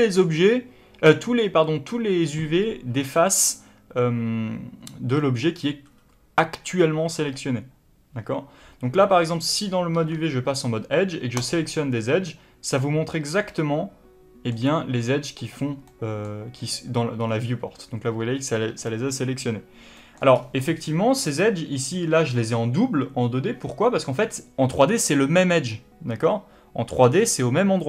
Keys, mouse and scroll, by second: 11.3 click, 12.7-19.9 middle drag, 17.1-18.4 scroll up 2, 18.4-19.9 scroll up 1, 20.2-20.5 scroll up 1, 20.5 middle click.